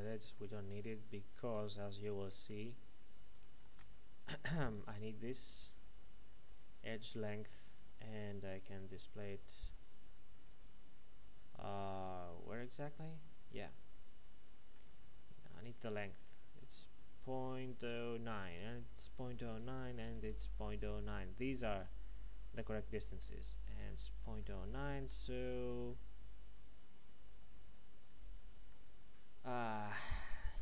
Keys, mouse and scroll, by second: 0.3 middle click, 3.2 right click, 4.2 click, 4.6 right click, 5.6-8.4 scroll down 1, 8.4 click, 11.3 click, 18.5 right click, 20.8 middle click, 23.7 right click, 24.4 middle click.